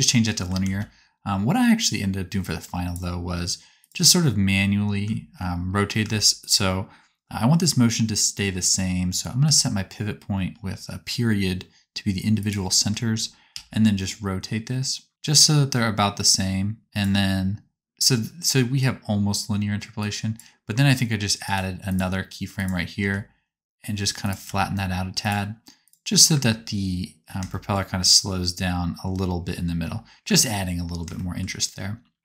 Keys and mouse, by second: 0.5 ctrl+z, 3.8-6.3 right drag, 13.4 r, 15.3-19.9 drag, 19.9 middle click, 22.5-25.7 right drag, 22.9 r, 24.4 s, 25.8 right click, 26.0-27.2 drag, 26.0-27.2 middle drag, 26.0-27.2 right drag, 26.2 space, 27.4 shift+click, 27.4 shift+middle click, 27.4 shift+right click, 29.8 space, 30.3 space.